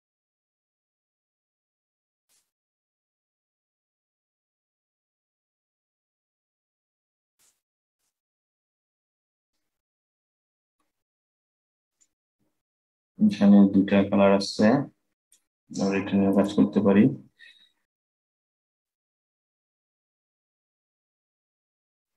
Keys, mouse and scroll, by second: 3.7-6.7 drag, 7.6 click, 8.1-11.6 middle drag, 11.6 click, 16.0 click.